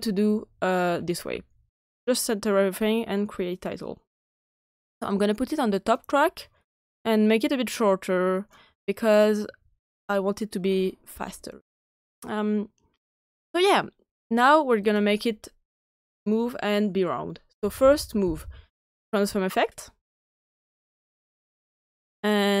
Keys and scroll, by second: 0.0-1.3 typing, 17.3-18.8 typing.